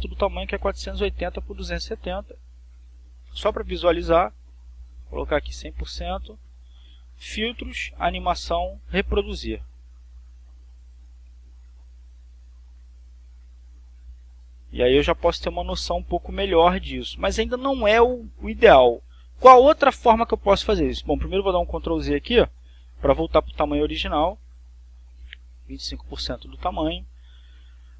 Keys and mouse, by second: 0.5-1.9 typing, 1.8 click, 2.5 click, 5.3 click, 6.0 click, 7.6 click, 9.4 click, 10.5 click, 16.3 click, 19.3 click, 23.1 ctrl+z, 24.9 click, 26.1 click.